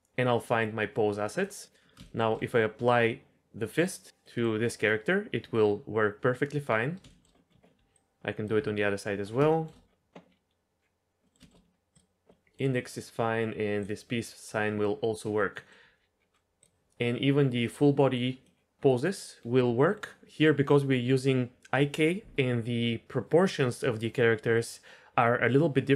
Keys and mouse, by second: 1.4 middle drag, 2.0 shift+middle drag, 4.2-6.6 middle drag, 7.0 shift+middle click, 9.5 shift+middle drag, 11.2 middle click, 11.4 shift+middle drag, 12.3 middle click, 15.5 middle click, 17.6-18.1 middle drag, 18.4 middle drag, 19.1 middle click.